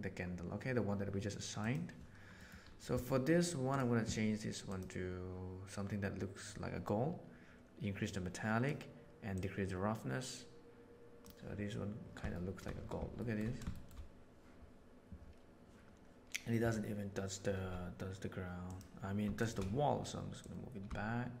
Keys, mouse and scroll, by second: 1.6 click, 2.4 middle click, 3.6 click, 8.0 click, 9.3-11.2 drag, 12.4 shift+middle click, 13.2 shift+middle click, 13.8 shift+middle drag, 18.6 click, 19.3 shift+right click, 20.3-21.4 drag.